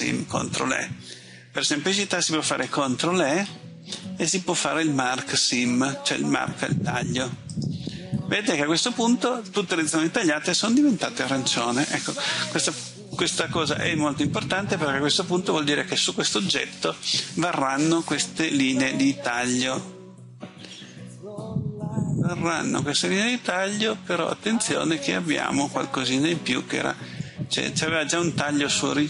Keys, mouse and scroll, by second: 3.3 ctrl+e, 7.6 click, 13.7 middle click.